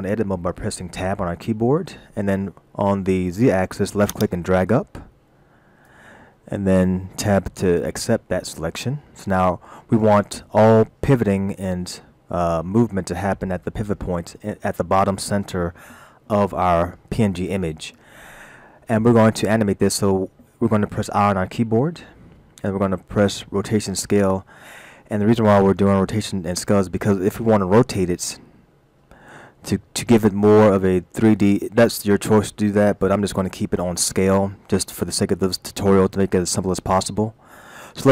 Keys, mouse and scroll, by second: 1.1 Tab, 4.1 click, 7.5 Tab, 7.9-8.9 scroll down 3, 8.9-10.2 scroll up 3, 21.8 i.